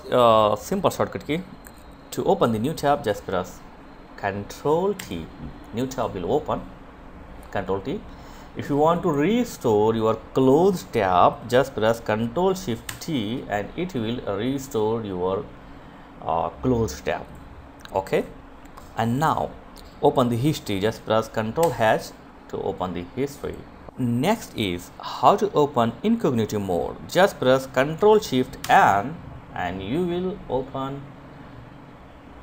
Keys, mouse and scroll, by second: 3.2 ctrl+t, 7.1 click, 11.0 ctrl+shift+t, 15.3 click, 21.4 click, 26.6 ctrl+shift+n, 32.2 click.